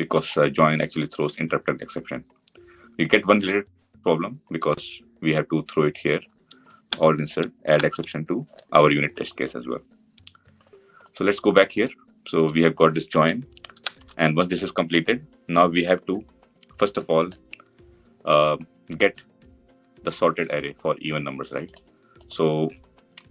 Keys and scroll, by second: 6.5 alt+Return.